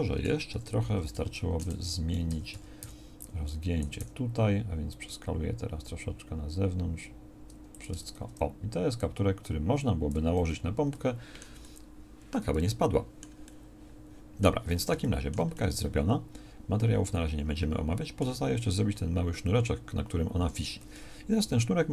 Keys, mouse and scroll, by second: 0.2 a, 0.6 KP_1, 1.7 z, 2.3 a, 2.6 a, 2.8 b, 4.0 s, 8.0 Tab, 10.4 z, 13.2 middle click.